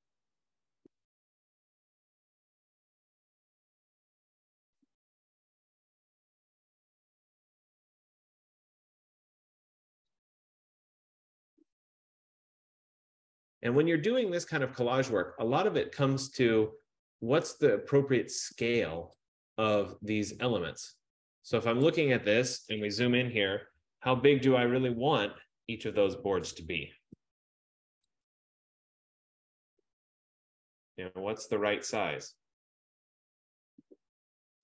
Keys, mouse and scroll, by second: 2.3 shift+click, 2.8 F15, 5.1 click, 10.1 shift+click, 13.0 click, 18.7 shift+click, 21.9 click, 23.9 ctrl+=, 24.7 ctrl+=, 25.2 ctrl+=, 25.6 ctrl+=.